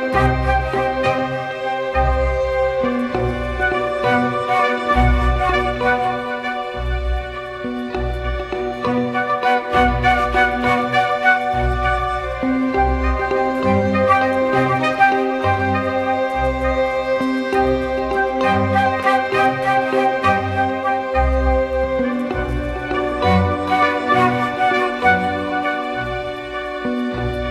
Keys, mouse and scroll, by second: 4.8 Return.